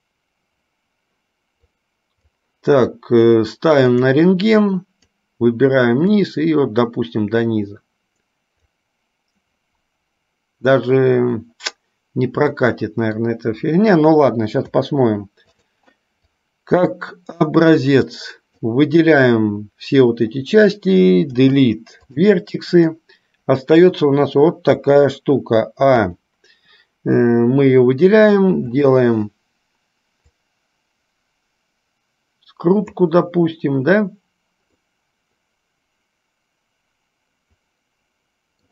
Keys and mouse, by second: 2.0 click, 4.8 click, 6.1-9.0 drag, 12.6 middle click, 15.6 click, 16.5-18.8 drag, 23.1-24.1 middle drag, 28.9 click, 30.4-33.0 drag, 34.9-38.7 middle drag.